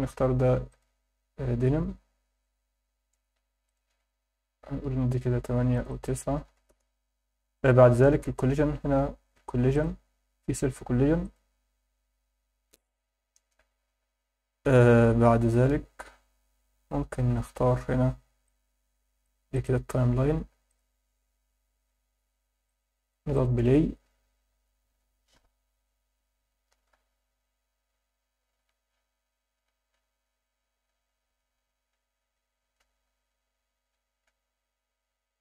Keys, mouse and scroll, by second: 3.7-7.0 drag, 7.0-7.8 scroll down 4, 8.5-9.7 scroll down 5, 9.7 click, 10.0 scroll down 2, 11.2 click, 14.4 scroll down 2, 16.0-17.3 scroll up 2, 18.4 click, 20.7 drag, 22.6 click, 23.3 click, 31.8 Escape, 32.8 KP_7, 33.3 scroll down 2, 34.2 g, 34.5 y.